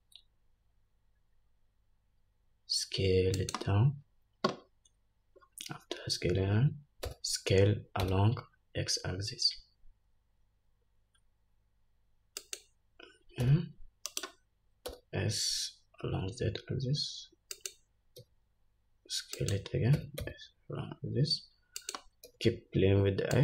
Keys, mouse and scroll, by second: 5.6-7.1 scroll up 1, 7.2 s, 15.0 s, 22.4 s.